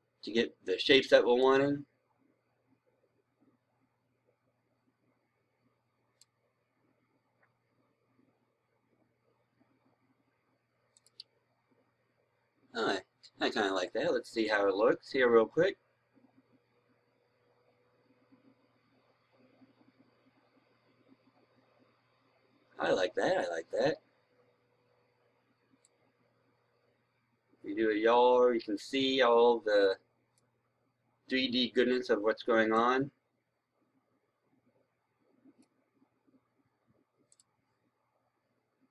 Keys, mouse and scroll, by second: 1.3-6.3 right drag, 8.1 scroll down 1, 9.2-10.9 scroll up 1, 10.9-36.3 drag.